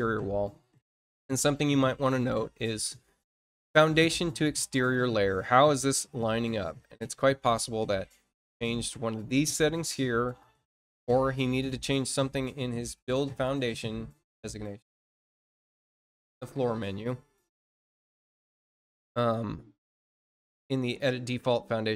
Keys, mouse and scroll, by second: 0.7 click, 4.7 click, 9.4 click, 10.3 click, 12.8 click, 16.0 click, 20.4 click.